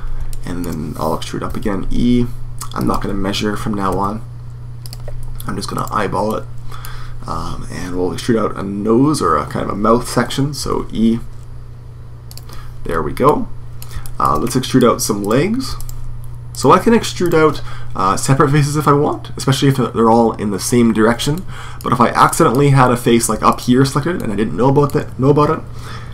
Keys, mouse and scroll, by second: 0.1-2.6 middle drag, 1.4 e, 3.7 e, 4.7-6.1 drag, 6.1 middle click, 6.6 click, 7.4 middle click, 7.6 d, 7.7 click, 10.4 e, 12.2-14.2 drag, 14.2 middle click, 15.0-19.0 right drag, 21.1 middle click, 23.3 click, 23.7 right click, 23.9-24.9 drag, 24.9 right click.